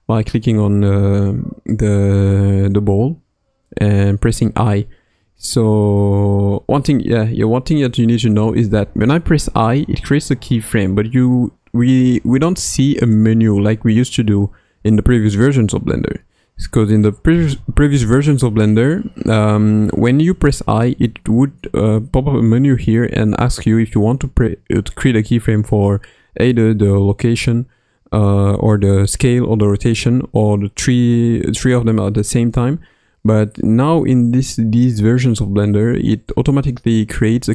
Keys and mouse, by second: 3.6 i.